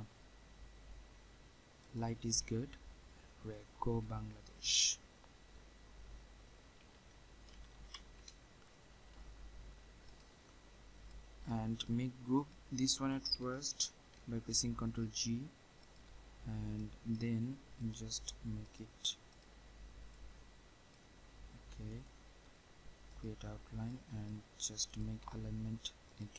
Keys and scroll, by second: 14.1 ctrl+g.